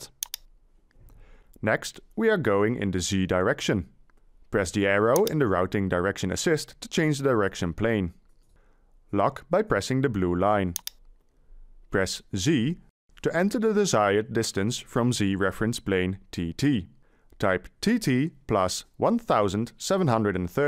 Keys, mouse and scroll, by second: 15.8 Delete, 17.0 t, 17.4 t, 19.1 1, 19.9 7, 20.4 3.